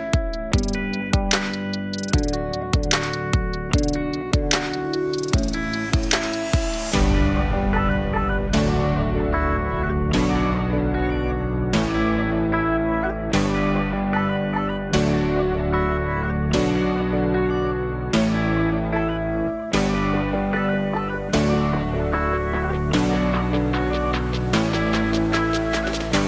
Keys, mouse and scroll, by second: 2.6 ctrl+z, 3.9 click, 6.1-8.6 drag, 10.1 click, 11.4-14.7 drag, 18.9-21.0 alt+drag, 21.0 scroll up 1, 21.9 middle click, 22.7-23.9 drag, 23.9 KP_0, 25.8-26.2 middle drag.